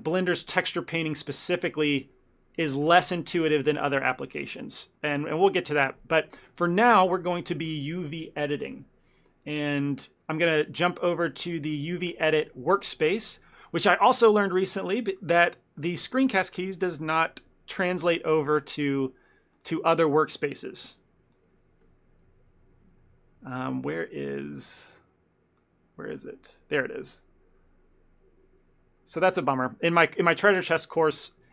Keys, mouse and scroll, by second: 6.4 middle click, 7.2 shift+middle click, 26.4 click, 30.0 n.